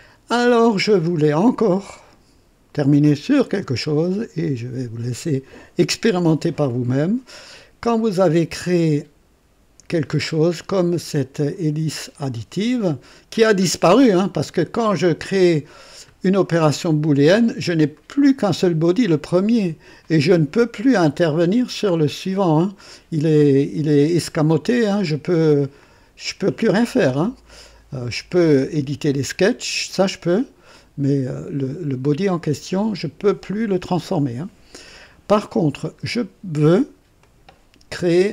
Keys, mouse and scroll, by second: 0.3 right click, 3.0 click, 11.8 click, 14.1 scroll up 2, 14.9 scroll up 2, 17.9 click, 20.0 click, 21.5-21.9 scroll down 2, 25.2 click, 28.2 click, 30.7 click, 35.1 scroll down 2, 35.9-36.3 scroll down 2, 37.2 click.